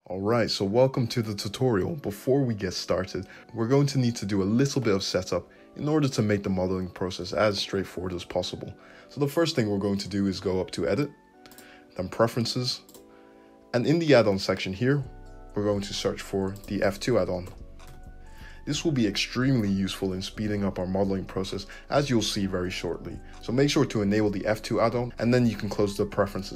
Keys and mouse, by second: 11.6-26.5 drag.